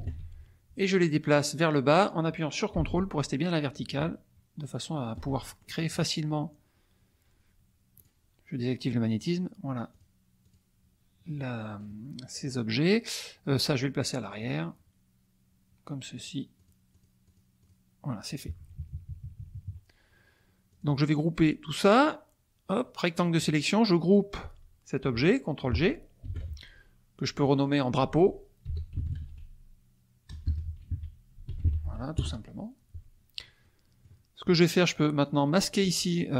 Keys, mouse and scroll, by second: 1.2-6.0 drag, 7.9 click, 9.9 click, 10.4 click, 12.3 click, 14.4 click, 16.1 click, 16.5 click, 16.9 click, 17.6 click, 18.4 KP_Subtract, 20.7 click, 22.0-23.6 drag, 26.2 ctrl+g, 27.4 click, 28.7-32.1 typing, 32.1 Return, 33.6 click, 33.8 middle click.